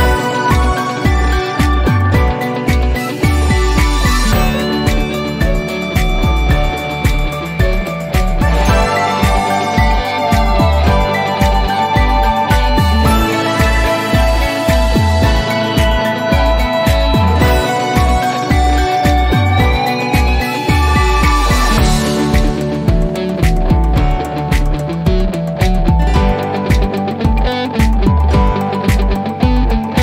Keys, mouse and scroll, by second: 1.1 click, 1.8-2.3 scroll down 1, 3.8 scroll up 1, 12.6 t, 14.0-14.4 scroll down 1, 16.9 click, 18.9 click, 22.3 click, 26.2 click, 28.6-30.0 drag.